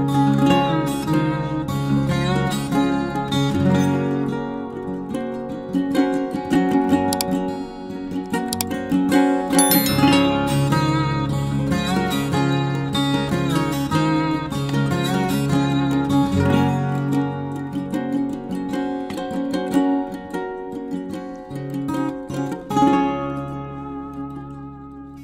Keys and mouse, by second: 8.1-8.5 shift+middle drag, 8.7 shift+middle drag, 9.8 k, 20.2-20.5 shift+middle drag, 20.8 shift+middle click, 21.8 k.